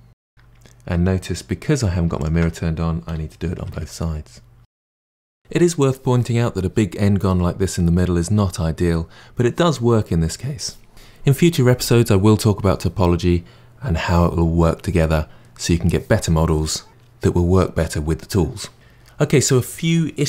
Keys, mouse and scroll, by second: 1.3-2.2 scroll up 2, 2.2 alt+click, 3.1 g, 5.4 g.